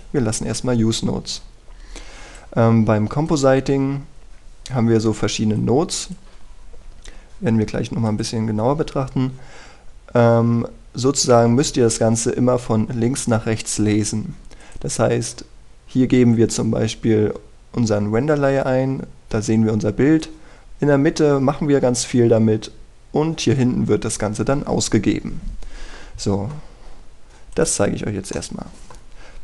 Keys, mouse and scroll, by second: 28.9-29.3 scroll up 1, 29.3-29.4 middle drag.